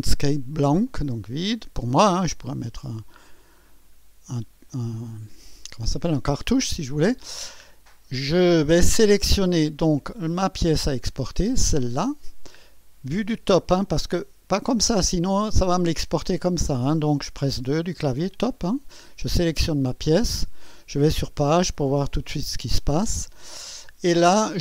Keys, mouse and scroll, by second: 0.9-1.9 drag, 3.0 click, 4.1-4.9 scroll down 2, 4.7-6.0 drag, 10.4 click, 11.9 click, 13.8-15.2 drag, 17.5 2, 19.6 click, 20.3-22.5 typing, 21.5-23.1 drag.